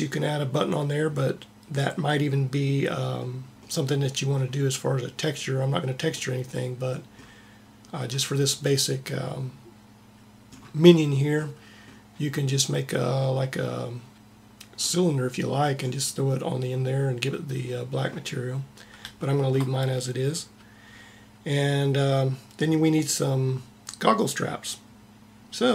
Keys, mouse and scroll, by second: 6.2-7.7 middle drag.